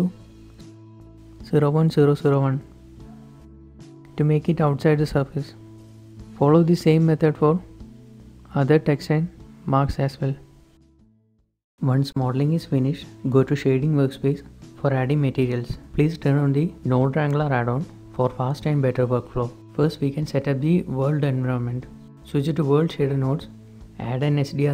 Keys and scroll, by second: 0.2 Right, 0.2 Left, 0.2 Return, 0.2-2.5 typing, 4.2 Tab, 4.5 Tab, 5.6 z, 6.5 7, 8.3 z, 10.4 typing, 22.5 ctrl+shift+t, 23.8 g.